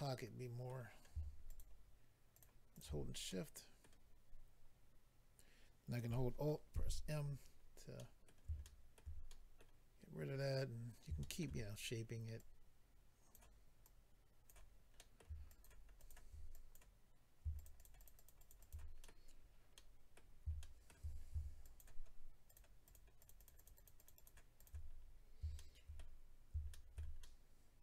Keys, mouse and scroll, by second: 0.9-1.4 scroll up 2, 1.4 shift+click, 2.3 shift+click, 2.4 shift+click, 2.7 shift+click, 2.8 shift+click, 3.2 middle click, 6.7 alt+m, 7.2-8.3 scroll down 4, 8.0 middle click, 8.6 shift+middle click, 9.5 middle click, 10.8 scroll up 1, 11.2 shift+middle click, 11.6-12.4 scroll up 2, 12.4 click, 13.8 click, 14.9 middle click, 15.5 shift+click, 16.0 shift+click, 16.5 click, 17.5 shift+double click, 17.6 shift+click, 17.7 shift+click, 17.8 shift+double click, 18.0 click, 18.0 shift+click, 18.1 shift+click, 18.3 shift+double click, 18.4 shift+click, 18.5 shift+click, 18.6 shift+click, 18.7 double click, 19.0 middle click, 19.1 middle click, 19.3-20.2 scroll down 3, 19.7 middle click, 20.6 shift+middle click, 20.9 middle click, 21.1-21.4 scroll up 1, 21.6 shift+click, 21.8 shift+click, 22.4 shift+click, 22.5 shift+click, 22.8 shift+click, 22.9 shift+click, 23.2 shift+click, 23.3 shift+double click, 23.4 shift+click, 23.5 shift+click, 23.5 shift+click, 23.6 shift+double click, 23.7 shift+click, 23.8 shift+click, 24.0 shift+click, 24.1 shift+double click, 24.1 shift+click, 24.3 shift+click, 24.5 shift+click, 24.6 shift+double click, 24.9-25.6 scroll down 3, 25.6 shift+middle click, 26.7 shift+middle click, 27.2 middle click.